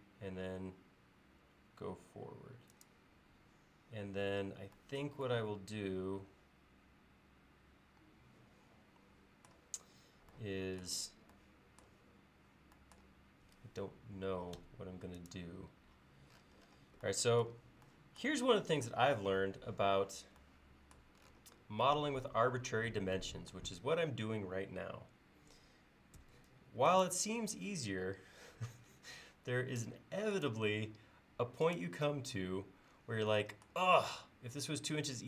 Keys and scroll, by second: 14.6 Escape, 26.2 space.